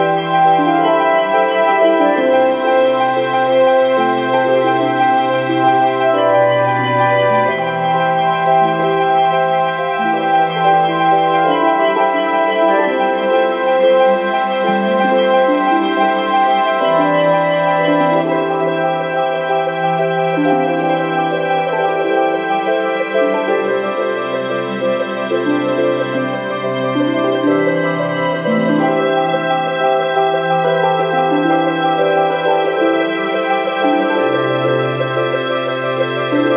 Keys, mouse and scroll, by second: 0.4 click, 2.2 ctrl+click, 4.2 click, 8.0 click, 10.6 click, 12.0 ctrl+click, 13.6 click, 15.2 click, 16.4 0, 16.9 ,, 17.3 5, 18.6 click, 23.1 click, 23.7 click, 25.5 click, 27.2 click, 29.0 click, 30.0 0, 30.6 ,, 31.0 5, 31.8 click, 32.6 1, 33.0 2, 33.6 scroll down 2, 34.2 scroll up 2, 35.6 click, 35.9 right click.